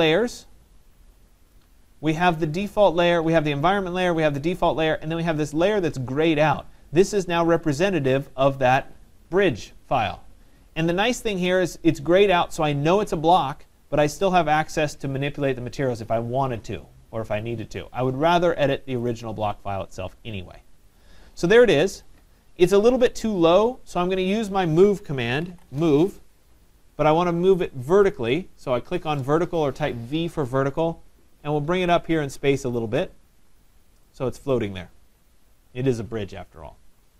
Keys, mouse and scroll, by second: 0.1 click, 4.8-5.3 drag, 7.6-12.7 drag, 19.1 drag, 21.0 click, 22.1 click, 25.0-26.2 typing, 28.1 click, 31.5 click, 33.6 click, 34.6 right click, 34.8 middle click, 34.8 middle click, 34.9 middle click, 35.7 scroll, 36.9 right click.